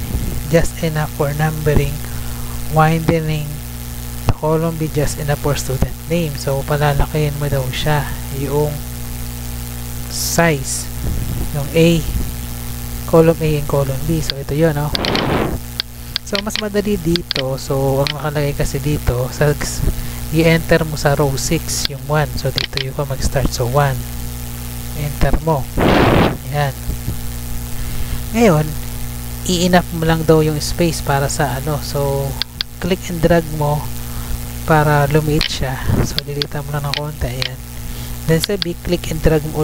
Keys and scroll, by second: 14.0 Tab, 18.1 Tab, 21.6 Tab, 23.7 1, 25.4 Return.